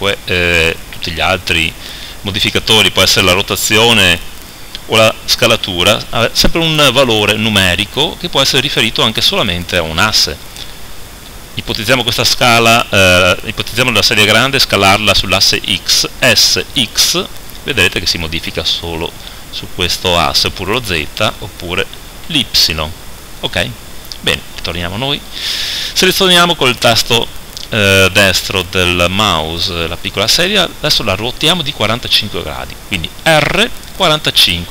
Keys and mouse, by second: 11.7-16.3 right drag, 16.3 s, 23.5-26.8 right drag, 24.5 KP_7, 33.3 r.